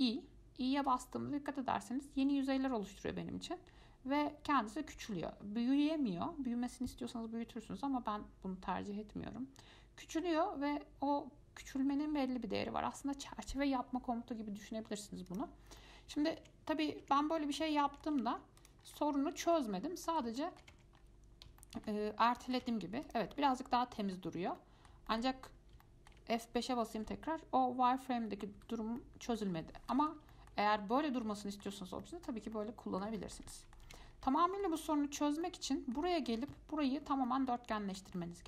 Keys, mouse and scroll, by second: 16.0 middle click, 16.4 scroll down 1, 16.6 Tab, 17.2-17.6 scroll down 1, 17.6 middle click, 18.5 Tab, 18.8 click, 19.0 scroll down 4, 19.2-19.9 middle drag, 19.9-20.3 scroll up 4, 20.3-20.9 middle drag, 20.9 Tab, 21.2-21.5 scroll up 2, 21.8 shift+middle click, 22.3 scroll down 1, 22.6 middle click, 22.9 Tab, 23.2 click, 23.5 middle click, 24.4-24.8 scroll down 1, 24.8 middle click, 25.7 scroll up 1, 26.0 shift+middle click, 26.7 F5, 28.8 F5, 29.2 middle click, 29.7-30.1 scroll down 3, 30.1-34.1 middle drag, 34.1 Tab, 34.3-34.6 scroll up 4, 34.6-36.4 shift+middle drag, 36.4-36.7 scroll up 1, 36.7-38.4 middle drag.